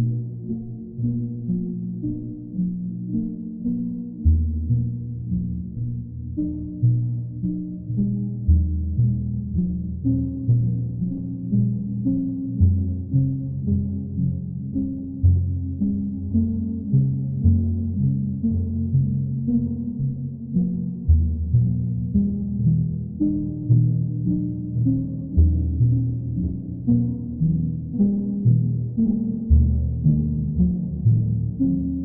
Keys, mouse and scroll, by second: 3.3-4.3 drag, 5.1-6.1 drag, 6.7-7.8 drag, 8.7-9.8 drag, 11.2-12.3 drag, 13.3 click, 17.7 right click, 18.2 alt+right click, 18.9 alt+right click, 20.0 alt+right click, 20.5 alt+right click, 21.1 alt+right click, 22.2 right click, 24.6 click, 29.8 right click, 31.7 click.